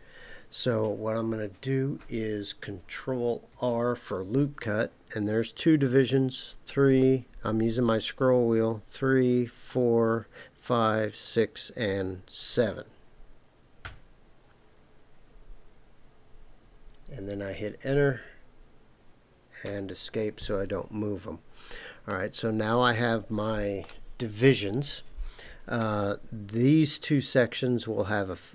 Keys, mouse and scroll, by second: 3.5 ctrl+r, 19.6 Escape, 22.1-23.9 middle drag.